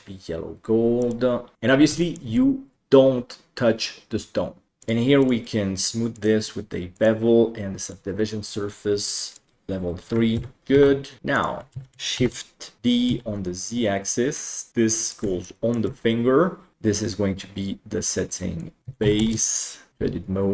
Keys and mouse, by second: 1.1 click, 2.0 shift+middle drag, 2.3-4.7 middle drag, 5.4-6.2 drag, 6.9-8.1 drag, 9.2-10.4 drag, 10.6 ctrl+KP_Divide, 11.2 ctrl+s, 11.3 click, 11.7 alt+z, 12.3 shift+d, 15.5-15.8 shift+middle drag, 16.7 F2, 19.9 Tab, 19.9 a.